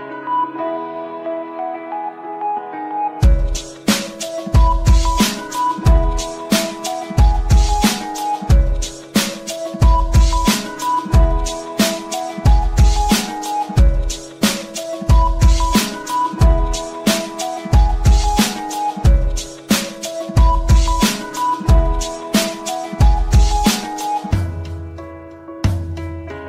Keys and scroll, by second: 7.7 shift+Page_Up, 8.8 shift+F2, 9.2 Escape, 22.1 KP_Add.